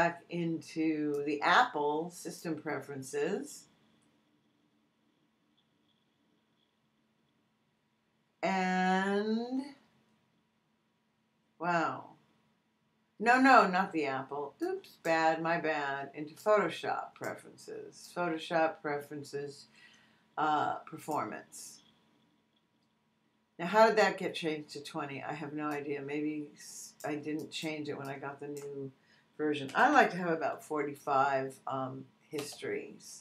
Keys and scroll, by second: 29.4-30.4 typing, 32.3 Return.